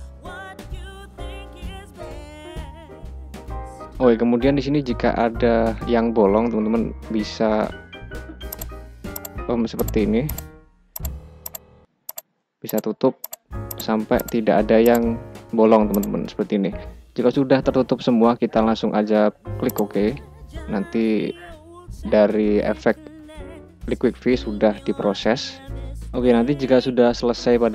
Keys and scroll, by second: 2.8 ctrl+z, 6.4 [.